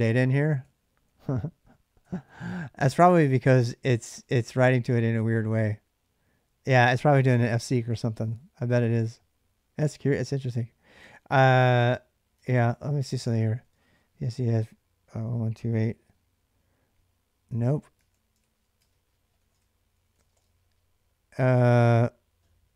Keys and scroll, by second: 0.0-3.7 typing, 10.8 ctrl+[, 10.9 k, 11.6 Return, 12.2 ctrl+[, 12.2 ctrl+j, 12.5-15.8 typing, 15.8 Return, 17.5-20.6 typing.